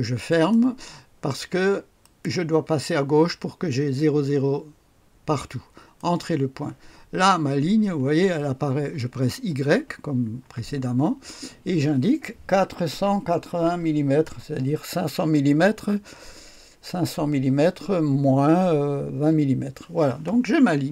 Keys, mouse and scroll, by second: 0.3 click, 2.0 click, 6.0 click, 10.4 y, 12.9 KP_4, 13.5 KP_8, 14.2 KP_0, 19.1 Return.